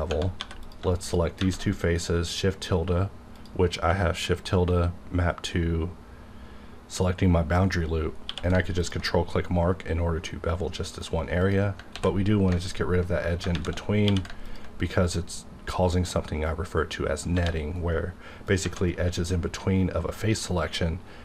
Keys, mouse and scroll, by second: 0.1 Tab, 0.3 3, 0.6 click, 1.0 shift+click, 1.0 shift+click, 1.4 shift+`, 3.3 click, 8.2 scroll up 1, 8.3 q, 8.8 ctrl+click, 9.9-10.7 scroll up 1, 11.4 click, 11.9 ctrl+x, 12.6 alt+click, 13.5 shift+`, 14.0 q, 14.4 ctrl+click, 15.1-15.8 scroll up 1, 17.3 1, 18.5 click, 18.6 Tab, 19.5-20.5 scroll down 1, 20.5-21.2 middle drag.